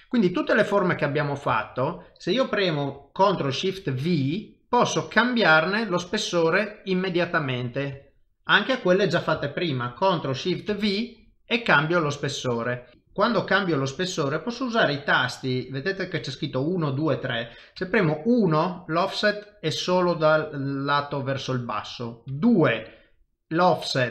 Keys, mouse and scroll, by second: 1.2 click, 1.5 shift+middle click, 1.7 shift+middle click, 4.0 ctrl+shift+v, 6.3 middle click, 7.7 click, 8.0 shift+middle click, 8.6 middle click, 10.7 ctrl+shift+v, 12.9 click, 12.9 middle click.